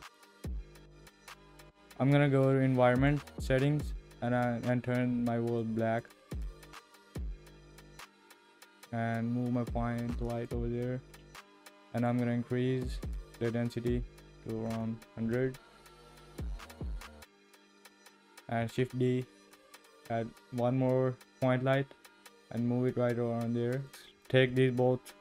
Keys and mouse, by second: 7.3 g, 12.0 click, 12.8-15.4 drag, 18.6 shift+d, 24.1 click, 24.5-25.2 shift+middle drag.